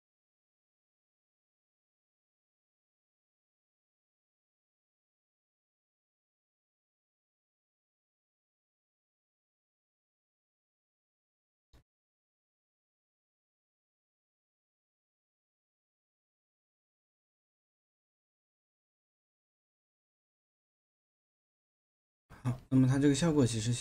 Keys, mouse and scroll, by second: 14.8 space, 23.4 space.